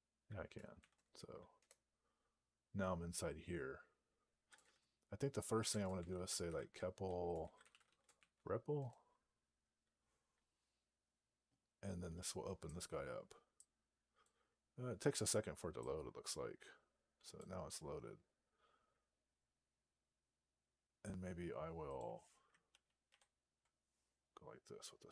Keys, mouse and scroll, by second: 0.6 ), 1.5 Return, 4.5 :, 5.5-8.5 typing, 8.6 Return.